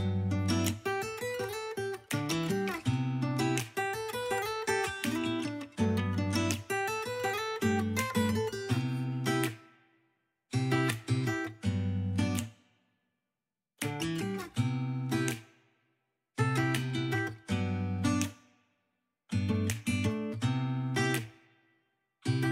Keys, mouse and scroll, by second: 0.8-2.2 shift+drag, 2.2 ctrl+middle click, 2.4 ctrl+click, 2.6 middle click, 2.9 click, 3.4 middle click, 3.6 shift+click, 4.2 middle click, 4.6 click, 4.6 shift+middle click, 4.8 f, 4.9 click, 5.8 shift+click, 6.3 ctrl+middle click, 7.0 shift+click, 7.1 middle click, 7.2 click, 7.5 middle click, 7.6 shift+click, 8.0 middle click, 8.1 shift+click, 8.2 middle click, 8.5 KP_1, 9.0 click, 9.3 ctrl+z, 9.4 click, 10.2 middle click, 10.4 KP_Decimal, 10.6 ctrl+shift+middle click, 10.8 shift+click, 10.9 middle click, 11.1 shift+click, 11.3 ctrl+middle click, 11.5 shift+click, 11.6 middle click, 11.8 KP_3, 11.9 click, 12.0 f, 12.1 click, 12.4 ctrl+middle click, 12.9 KP_1, 13.1 ctrl+middle click, 13.3 click, 13.5 ctrl+z, 13.6 click, 14.0 ctrl+middle click, 14.2 click, 14.4 middle click, 14.6 shift+click, 14.9 middle click, 15.1 KP_3, 15.3 ctrl+middle click, 15.4 click, 15.6 ctrl+middle click, 16.4 click, 16.4 f, 16.6 click, 16.7 ctrl+z, 16.8 f, 16.9 f, 17.0 click, 17.2 ctrl+middle click, 17.3 click, 17.5 middle click, 17.6 click, 17.6 middle click, 17.9 click, 18.3 f, 18.4 shift+click, 19.1 ctrl+middle click, 19.6 ctrl+middle click, 20.1 click, 20.5 middle click, 20.7 click, 20.9 ctrl+middle click, 21.5 KP_1, 21.6 ctrl+middle click, 22.4 KP_1.